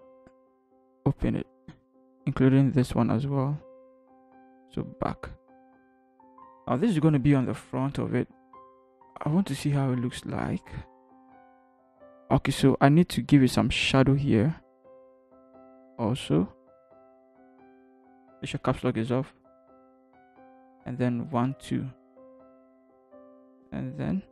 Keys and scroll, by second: 8.7 ctrl+h, 9.5 ctrl+h, 17.8 b, 18.5 Caps_Lock, 22.4 ctrl+t.